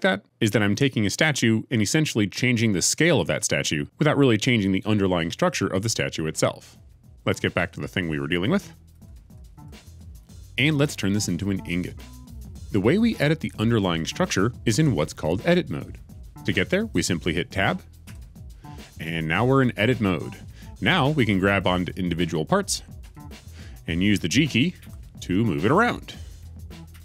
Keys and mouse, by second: 8.9 ctrl+z, 9.2 ctrl+z, 9.5 ctrl+z, 9.8 ctrl+z, 10.1 ctrl+z, 18.0 Tab, 23.0 click, 24.7 g, 26.8 Escape.